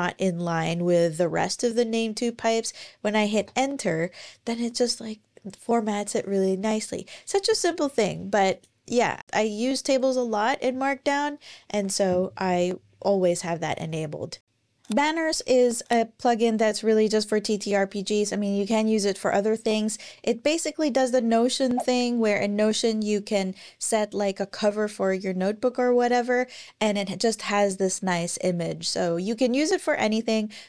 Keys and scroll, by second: 3.2 Return, 11.5 super+,.